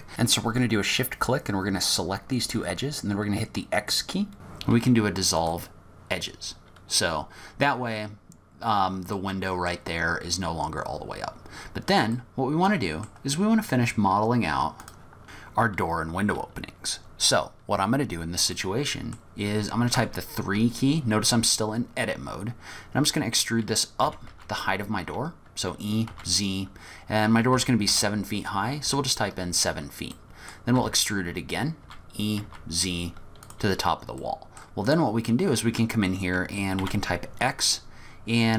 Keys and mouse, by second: 2.2 e, 9.3 middle click, 12.2 middle click, 18.6 middle click, 18.7 click, 20.0 3, 24.0 e, 30.2 click, 30.8 e, 34.4 click, 36.8 x.